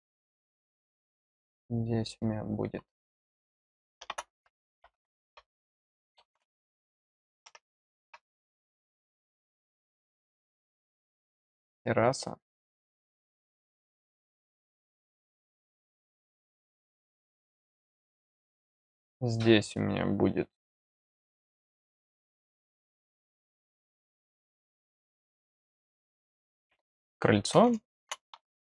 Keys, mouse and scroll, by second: 1.3 click, 10.6 click, 14.6 click, 15.4 click, 23.2 click, 23.7 click.